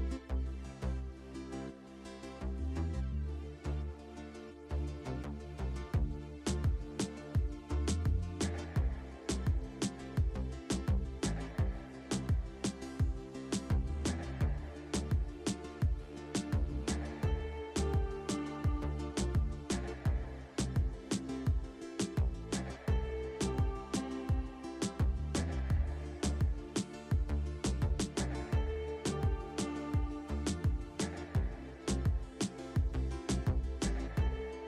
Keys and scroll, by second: 0.6 alt+w, 2.7 alt+w, 4.4 alt+w, 5.8 alt+w, 7.1 alt+w, 8.5 alt+w, 10.6 alt+w, 11.5 alt+w, 12.8 alt+w, 13.7 alt+w, 14.9 alt+w, 15.6 alt+w, 18.0 alt+w, 19.4 alt+w, 21.0 alt+w, 21.8 alt+w, 22.9 alt+w, 23.7 alt+w, 25.6 alt+w, 26.7 alt+w, 29.6 alt+w.